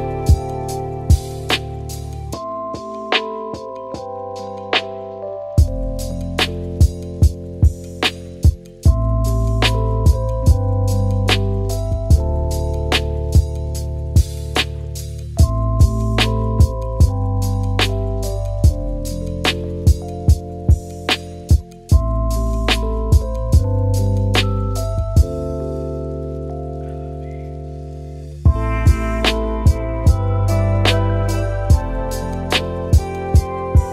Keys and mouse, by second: 0.8-1.5 middle drag, 1.8 KP_7, 2.6-3.2 middle drag, 11.1 click, 12.8 shift+middle drag, 13.2-13.6 shift+middle drag, 14.7 r, 17.8 middle drag, 18.2 shift+middle drag, 19.2 g, 20.0 s, 21.2 g, 22.9 shift+d, 25.2 shift+drag, 25.6 shift+middle drag, 25.9 shift+d, 27.6 r, 31.2-32.4 middle drag, 33.0-33.6 middle drag.